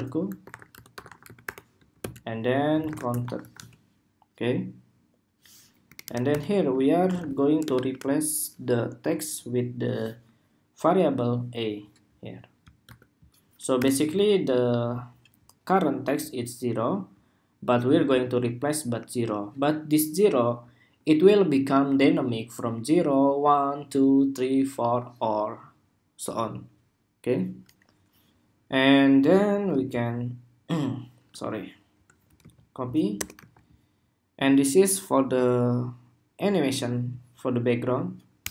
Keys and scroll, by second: 29.4 super+d, 32.1 super+c, 33.1 super+v.